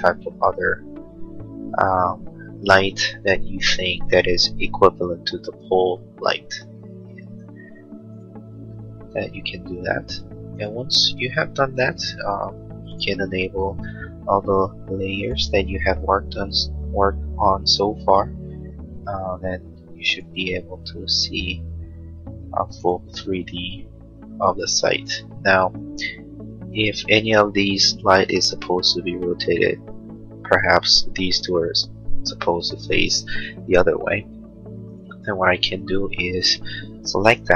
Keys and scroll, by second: 34.3 space.